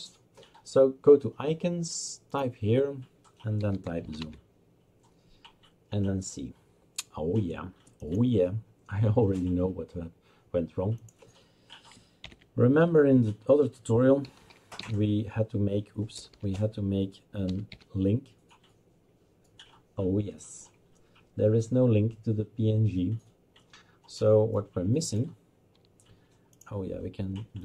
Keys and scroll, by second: 3.4-4.7 typing, 14.1-18.2 typing.